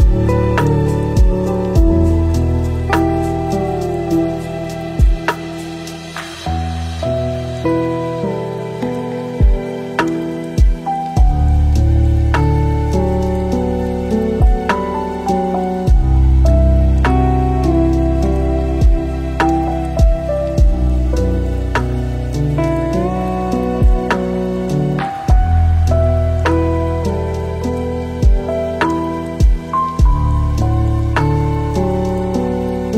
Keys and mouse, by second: 1.4 click, 1.9 shift+d, 3.6 s, 4.8 shift+d, 5.8 shift+d, 8.9 click, 10.0-11.4 drag, 12.1 click, 13.5-14.3 drag, 18.5-19.6 drag, 22.2 click, 22.5 shift+click, 22.8 shift+click, 23.1 shift+drag, 23.6 s, 24.9 g, 25.9 r, 27.9 g, 29.3 click, 30.6 click, 31.2-31.6 shift+drag, 32.0 s.